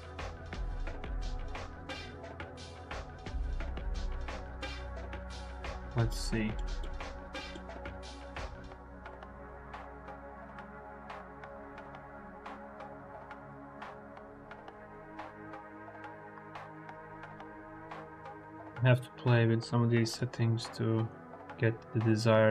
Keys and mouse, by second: 2.7-5.7 drag, 6.4 click, 7.0 click, 8.0-10.9 drag, 13.3-14.7 drag, 15.1 ctrl+z, 15.8 click, 16.6 click, 16.8 click, 20.1-22.5 drag.